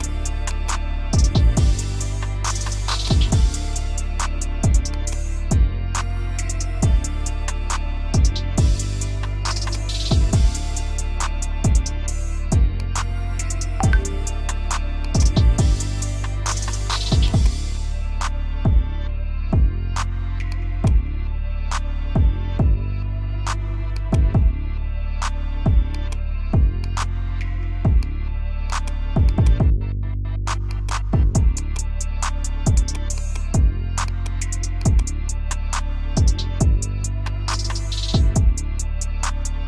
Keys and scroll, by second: 17.9 3, 18.3 Return, 29.9 ctrl+z, 34.0 space, 35.2 e, 36.4 Escape, 38.9 F2.